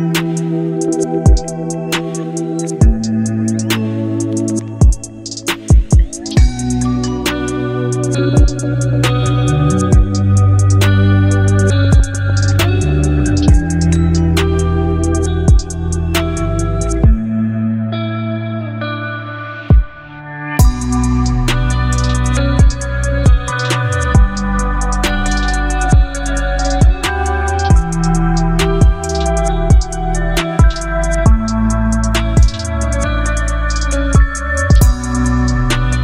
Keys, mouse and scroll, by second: 0.6 Return, 3.6 click, 6.1-12.1 drag, 12.1 e, 13.7-14.5 typing, 16.1 4, 17.4-18.5 typing, 19.1 Return, 22.0 click, 24.5-30.6 drag, 30.9 e, 32.4-35.8 typing.